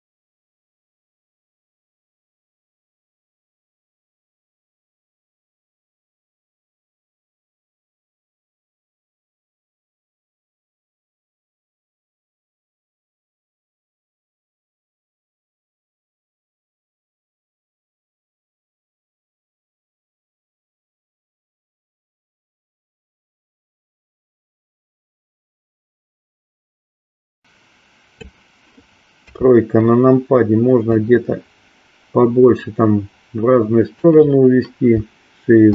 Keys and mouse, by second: 2.7 click, 4.1-6.7 drag, 7.9-10.5 drag, 11.2 KP_7, 13.0 r, 15.6 KP_1, 17.0-19.6 middle drag, 24.2-28.2 drag, 29.2 KP_3, 30.9-34.1 drag.